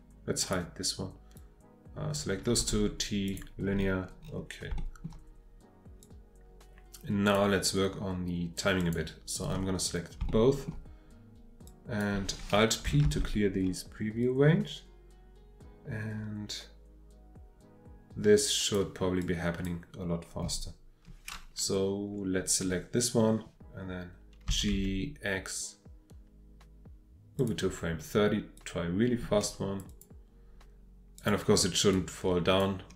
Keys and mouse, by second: 0.4 click, 1.3-2.2 drag, 2.6 t, 4.7 shift+middle click, 6.0-7.3 drag, 8.8 click, 10.3 shift+middle click, 11.7 click, 13.1 alt+p, 16.1-18.7 drag, 19.2-19.7 drag, 24.5 g, 24.7 x, 27.4 click, 28.6-29.8 drag, 29.9 click, 31.2 click, 31.9-32.6 drag.